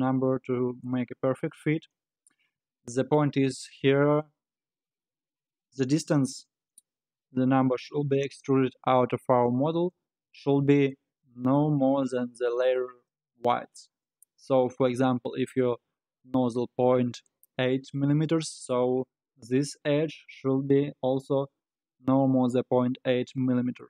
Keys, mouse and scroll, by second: 0.9-3.9 middle drag, 5.6-6.4 scroll down 9, 6.6-7.1 scroll up 5, 7.1-10.1 scroll down 4.